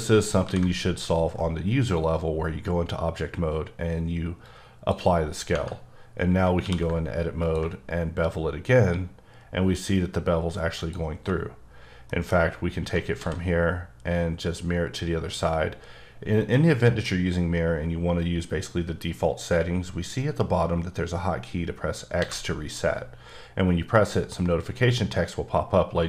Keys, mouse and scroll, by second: 0.4 ctrl+a, 4.7 click, 5.5 Tab, 6.6 q, 7.4 ctrl+click, 8.2-9.0 scroll up 4, 9.0-10.8 scroll up 2, 10.8 click, 11.1 Tab, 11.6-12.1 scroll down 2, 12.1 middle click, 13.1 alt+x, 15.8-16.5 scroll up 1, 16.5 middle click, 22.1 x.